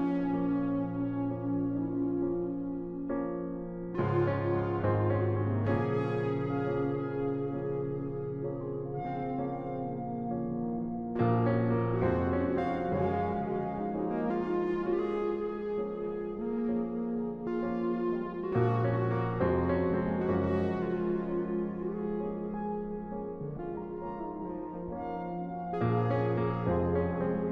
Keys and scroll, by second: 6.9 Return, 15.4 ctrl+t, 18.8 Return.